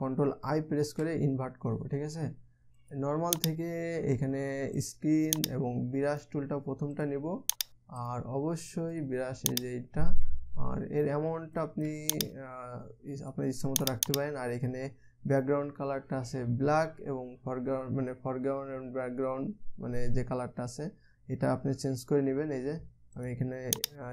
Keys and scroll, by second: 1.5 ctrl+i.